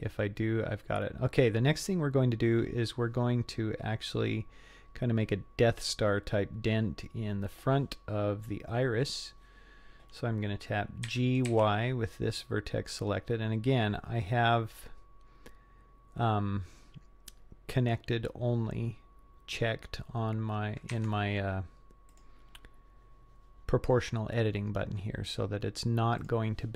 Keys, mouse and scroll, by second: 0.5-2.0 scroll down 5, 2.0 scroll up 2, 5.3-6.1 scroll down 1, 6.1 scroll up 1, 11.1 g, 22.1-26.0 drag, 26.2 click.